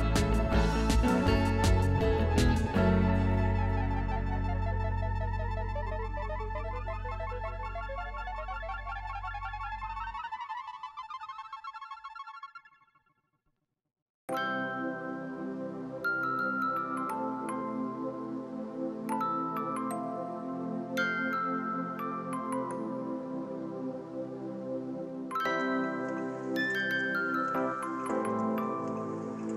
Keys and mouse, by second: 1.0 a, 1.1 click, 1.5 Escape, 1.8 click, 3.0 ctrl+1, 5.6 click, 6.9 click, 11.0 right click, 11.8 click, 13.1-13.9 typing, 13.9 click, 14.9 ctrl+1, 15.3 click, 17.7 click, 19.6 ctrl+click, 22.4 ctrl+1, 22.7 click, 24.5 click.